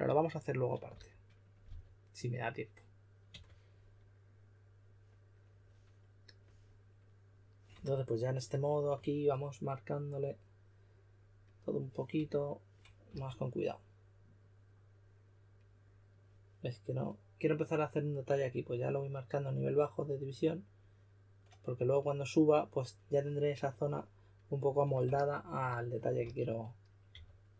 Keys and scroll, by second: 0.8-2.1 typing, 3.2 typing, 13.0 s, 26.2-27.5 typing.